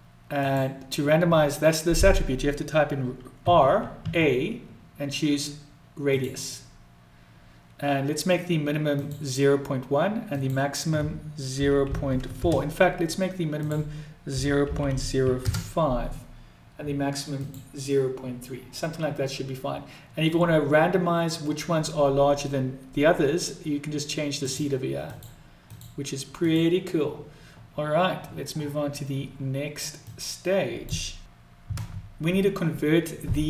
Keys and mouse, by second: 0.3-6.2 drag, 8.9 click, 10.4-13.0 drag, 13.5-16.1 drag, 17.4 click, 24.3 click, 25.1 click, 25.6 click, 26.3 click, 30.2 click.